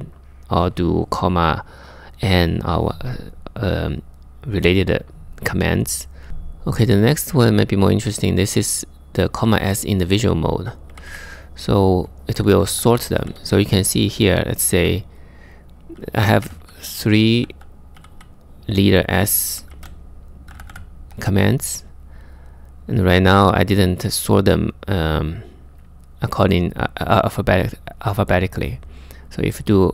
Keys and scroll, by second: 6.3 j, 10.5 k, 12.1-13.8 typing, 16.0-17.8 typing, 19.4-20.1 typing, 29.7-29.9 typing.